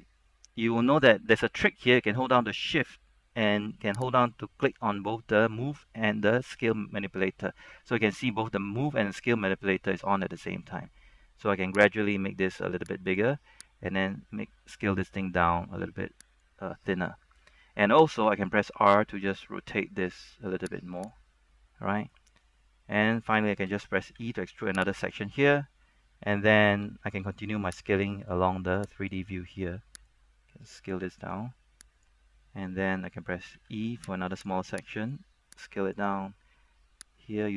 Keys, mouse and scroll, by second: 4.3 shift+click, 8.4-10.1 scroll up 1, 10.1-12.2 scroll down 1, 12.2-16.7 drag, 18.4 r, 21.1 click, 21.4 scroll down 1, 21.6 middle click, 22.3-23.0 scroll down 1, 23.0 middle click, 24.3 shift+middle click, 24.3 e, 25.1 click, 26.7 scroll up 1, 27.0 shift+middle click, 28.1-33.0 drag, 33.7 e, 34.5-37.5 drag.